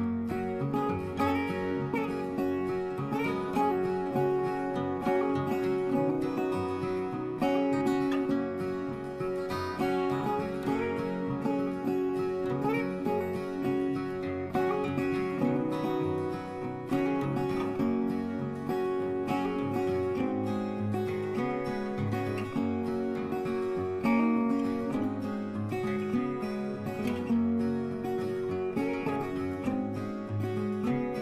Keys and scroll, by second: 5.3 ctrl+j.